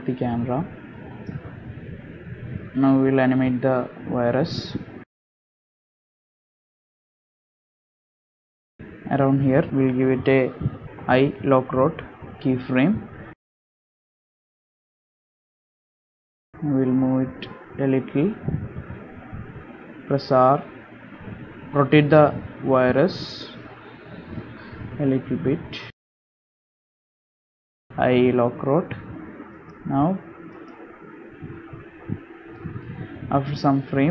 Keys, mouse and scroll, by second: 2.9 click, 3.7 space, 5.0 click, 7.2 click, 9.2 space, 9.7 click, 10.3 shift+middle click, 10.5 scroll up 2, 12.3 i, 19.0 click, 25.0 r, 27.4 r, 29.9 i, 32.1 space, 33.1 space, 33.7-34.1 scroll down 5.